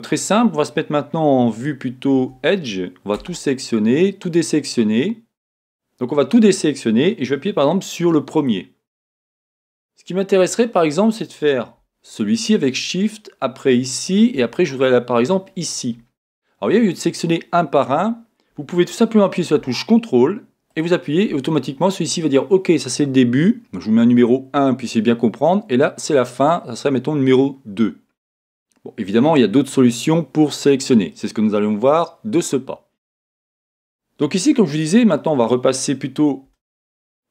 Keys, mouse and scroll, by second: 3.1 a, 8.3 click, 12.1 shift+click, 13.6 shift+click, 20.7 ctrl+click, 28.9 scroll down 1, 36.5 1.